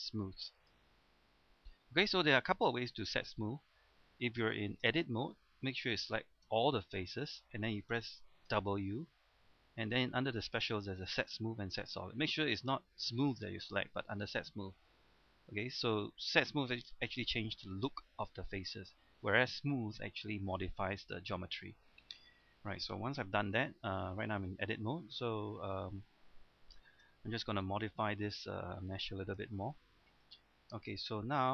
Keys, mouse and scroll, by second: 0.6 click, 1.4-2.9 scroll up 1, 2.9 middle click, 4.1-4.9 scroll down 1, 4.9 Tab, 6.5 a, 7.0 a, 8.5 w, 22.4-22.8 scroll up 1, 22.8-24.1 scroll down 1, 24.1 middle click, 24.8-25.1 scroll up 1, 25.1-26.2 middle drag, 26.2-26.8 scroll down 2, 26.8 shift+middle click, 27.1-27.5 scroll up 1, 27.7 middle click, 29.2 scroll down 1, 29.5-31.5 shift+middle drag.